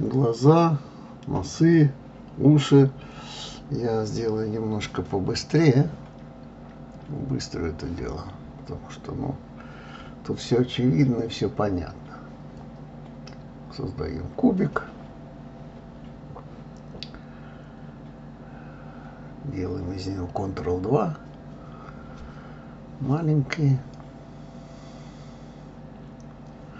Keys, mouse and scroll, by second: 1.6 click, 2.1-4.1 middle drag, 4.1-5.1 scroll up 1, 5.1-6.2 scroll up 1, 6.7-7.7 middle drag, 8.4-9.4 drag, 9.9 shift+r, 10.3 click, 11.0 click, 11.4 shift+a, 14.4 click, 15.4 Escape, 16.4 s, 17.3 middle click, 17.9 g, 18.4-19.4 middle drag, 20.1 ctrl+2, 20.7-21.7 drag, 22.7-23.9 middle drag, 23.9 d, 24.5 KP_1, 24.9 click.